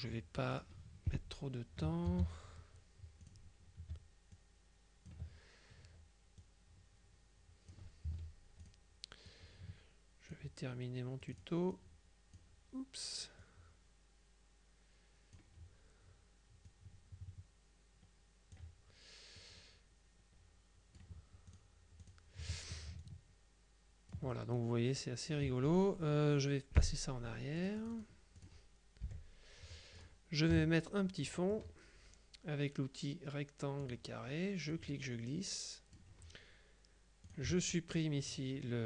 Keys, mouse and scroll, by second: 0.6 click, 2.1 ctrl+d, 3.3 click, 4.4 ctrl+click, 6.5-8.3 drag, 8.1 F2, 8.7 click, 9.3-10.9 drag, 11.3 click, 13.5-15.9 drag, 16.7-19.1 drag, 19.5-22.1 drag, 22.5 F1, 23.1-24.7 ctrl+drag, 26.9 End, 27.7 click, 29.1 End, 30.1 click, 30.6 KP_Subtract, 31.3 click, 33.9 click, 34.8-36.5 drag, 37.3 click.